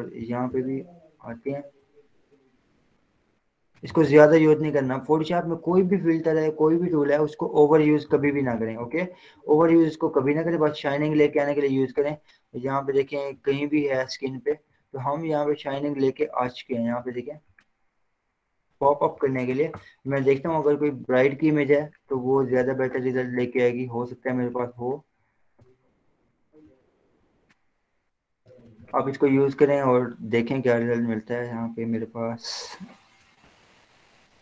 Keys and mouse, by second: 1.4-4.2 drag, 4.2 h, 5.3 click, 8.2 ], 8.4 ], 8.6 ], 9.7 click, 14.2 ctrl+0, 14.9 z, 15.8 click, 19.4 ctrl+w, 19.7 Down, 20.0 Return, 20.9 ctrl+o, 22.6 click, 24.6 click.